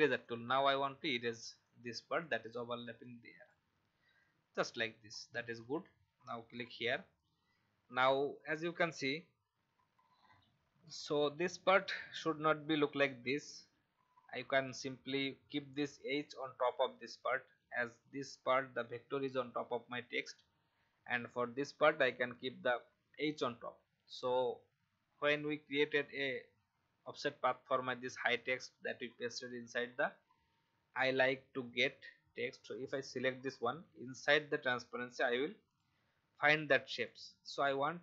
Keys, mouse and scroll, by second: 0.2-1.6 drag, 5.2 alt+scroll down 1, 6.5 click, 9.9 F10, 10.9 click.